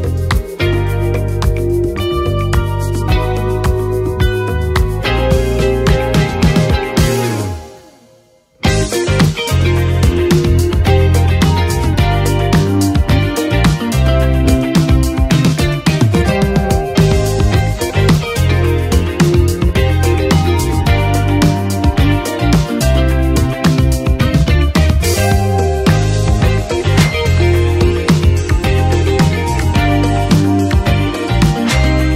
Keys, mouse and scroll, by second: 3.1 shift+click, 7.9-17.1 drag, 21.5 space, 26.0-31.9 drag, 31.9-32.1 drag.